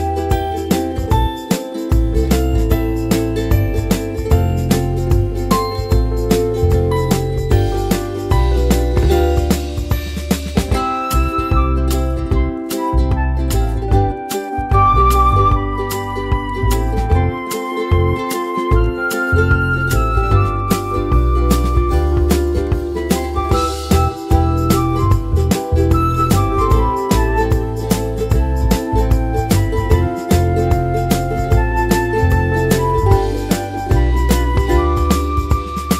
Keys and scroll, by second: 12.6-15.1 typing, 15.5 Return.